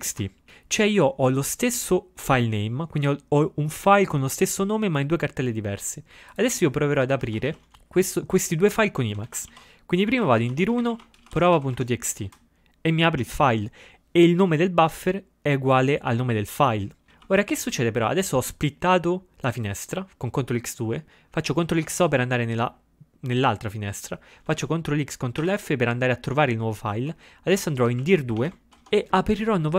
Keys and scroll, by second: 7.3 ctrl+x, 7.6 k, 9.4 ctrl+x, 9.6 ctrl+f, 10.0-12.8 typing, 17.1 ctrl+x, 17.2 2, 21.8 ctrl+x, 22.0 o, 24.6 ctrl+x, 25.5 ctrl+f, 26.9-29.4 typing.